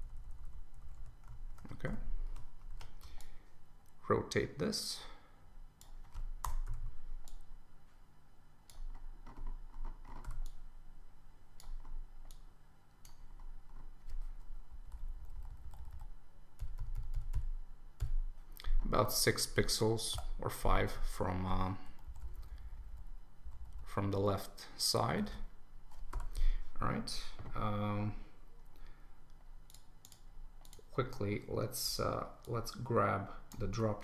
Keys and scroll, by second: 1.5 super+Return, 2.7 super+t, 6.4 Return, 14.7 Down, 15.2 Right, 22.0 Down, 23.4 Up, 25.3 super+s.